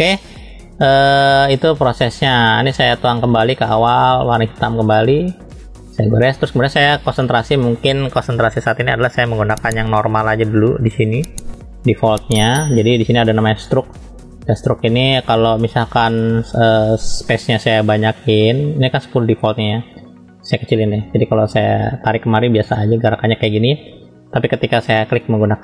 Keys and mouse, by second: 0.9 middle click, 4.3 click, 5.7 click, 7.3-11.4 drag, 12.0 middle click, 13.6-19.2 drag, 20.7-21.6 typing, 22.0 click, 23.5 ctrl+z, 24.9-25.6 drag.